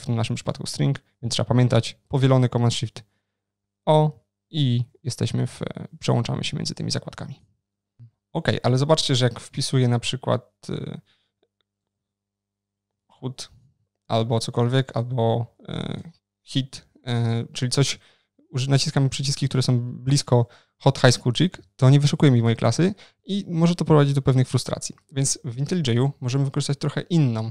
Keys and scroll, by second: 2.4 ctrl+shift+n.